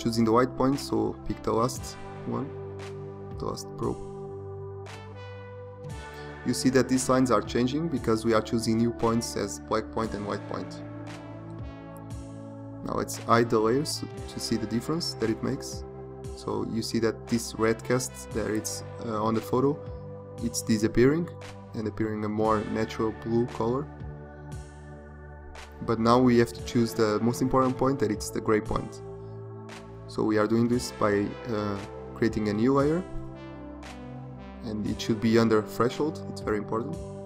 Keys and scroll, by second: 9.2 ctrl+0.